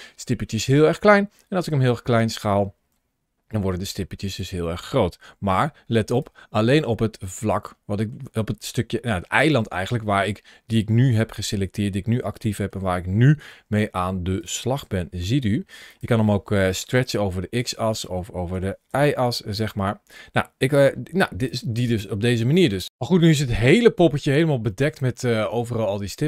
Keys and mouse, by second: 1.9 click, 2.7 s, 5.1 g, 6.0 click, 6.6-7.9 middle drag, 8.6 g, 12.3 shift+middle click, 13.3 s, 14.2 click, 14.6 g, 15.7 click, 16.7 s, 17.7 click, 18.4 s, 18.7 y, 19.4 click, 20.7 g, 21.3 click, 22.6 middle click, 24.5 shift+middle click, 25.0-26.2 middle drag.